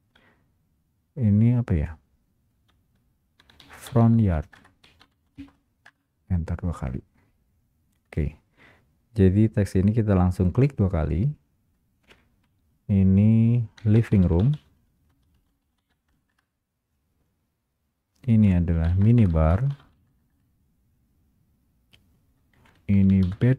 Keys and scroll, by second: 4.7 Return, 15.2 Return, 15.3 space, 16.2 Return, 20.2 space, 20.2 Return.